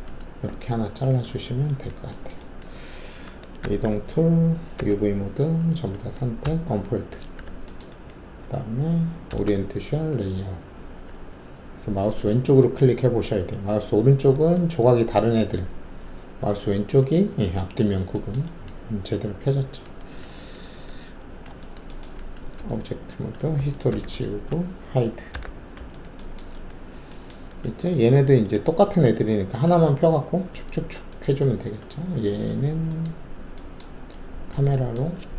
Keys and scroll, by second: 3.6 alt+w, 4.7 alt+4, 6.4 d, 9.2 alt+a, 9.9 z, 22.5 alt+`, 23.9 alt+d, 25.3 h.